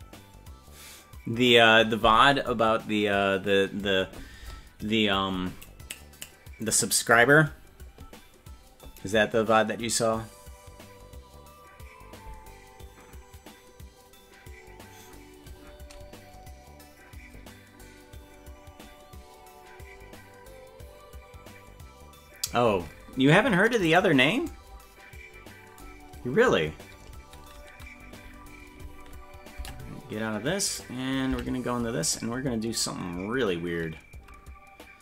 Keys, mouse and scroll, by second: 23.9 right click, 29.6 Tab, 30.7 right click, 31.3 Tab, 32.0 click.